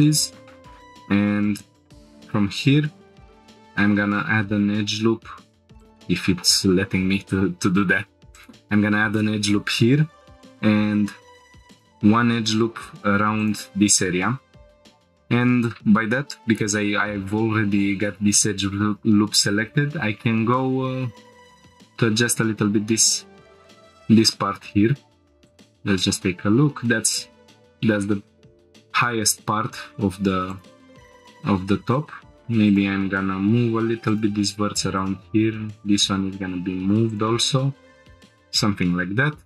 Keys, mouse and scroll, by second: 0.0-0.5 shift+middle drag, 0.8 scroll up 1, 2.2 ctrl+r, 8.3-10.2 drag, 10.3 ctrl+r, 13.4-14.3 drag, 14.8 click, 15.7 scroll up 1, 18.6 scroll up 1, 19.3 g, 19.5 z, 21.6-23.3 drag, 23.9 scroll up 1, 25.4 click, 30.5 click, 30.5 scroll up 1, 31.0 g, 31.9 click, 32.8 shift+click, 33.0 g, 34.1-35.3 drag, 35.3 g, 37.1-38.2 drag, 38.5-39.0 scroll down 2, 38.8 middle click, 39.4 scroll down 1.